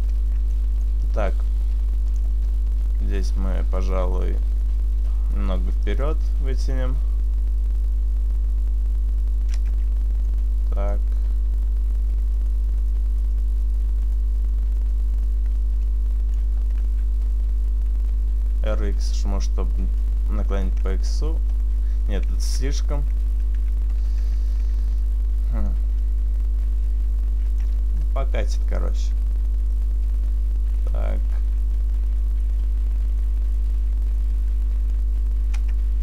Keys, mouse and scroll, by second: 0.2 Tab, 0.4 middle click, 2.2 click, 3.3 shift+right click, 3.6 right click, 4.1 shift+right click, 4.3 shift+right click, 4.8 shift+right click, 5.2 shift+right click, 5.9 shift+right click, 6.1 click, 9.7 Tab, 9.9 middle click, 10.8 Tab, 12.1 right click, 13.0 shift+right click, 14.0 shift+right click, 15.9 shift+right click, 15.9 click, 16.8 r, 19.3 click, 19.8 click, 20.9 Tab, 21.2 scroll down 1, 21.5-22.4 scroll up 1, 22.4 Tab, 22.4 ctrl+z, 23.6 ctrl+z, 23.8 ctrl+z, 24.7 Tab, 25.0-25.8 scroll down 1, 25.8 middle click, 25.8-26.5 scroll down 1, 27.7 Tab, 28.0-28.8 scroll up 1, 28.8 right click, 28.8-29.4 scroll up 1, 29.4 shift+right click, 29.8 shift+right click, 30.4 shift+right click, 30.9 shift+right click, 31.3 shift+right click, 32.2 shift+right click, 32.5 shift+right click, 33.2 shift+right click, 35.0 shift+right click, 35.0 click, 35.8 Tab.